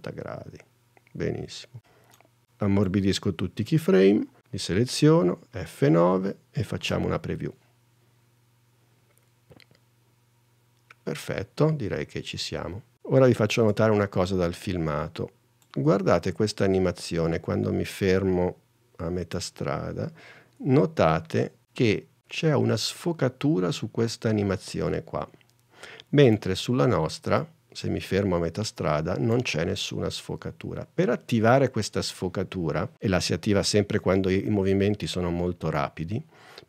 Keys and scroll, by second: 5.4 F9, 7.0 space, 13.7 super+Tab.